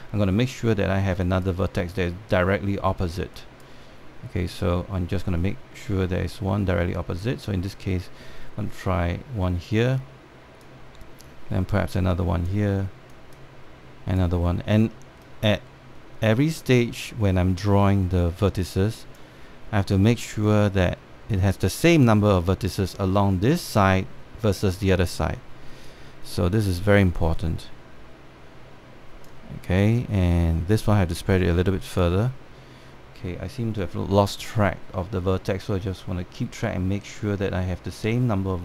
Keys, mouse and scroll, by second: 2.0 click, 4.1-6.2 drag, 7.9 click, 11.4-23.9 drag, 26.5-33.8 drag.